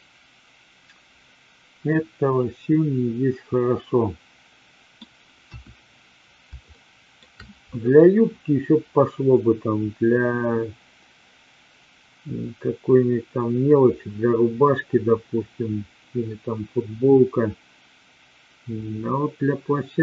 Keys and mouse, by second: 5.3 KP_1, 6.7-7.2 shift+middle drag.